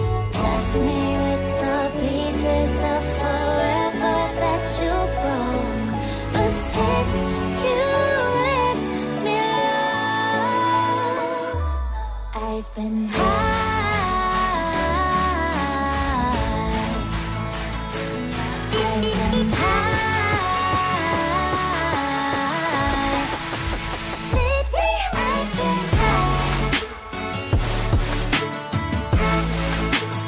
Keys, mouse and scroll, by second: 0.6 click, 2.5 double click, 5.4 double click, 5.9 shift+click, 7.2 ctrl+c, 7.4 ctrl+v, 8.3 click, 18.1 right click, 18.7 click, 22.4 click.